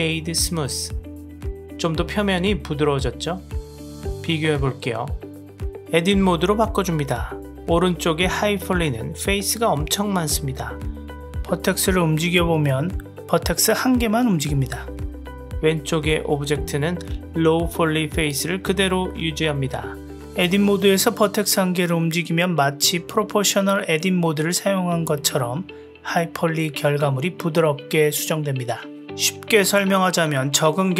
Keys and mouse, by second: 0.2 click, 0.6 click, 1.0-3.2 middle drag, 4.2-4.6 drag, 5.8 Tab, 6.8 click, 11.8 click, 12.3 g, 20.7 g, 26.3-27.4 middle drag, 30.0 g.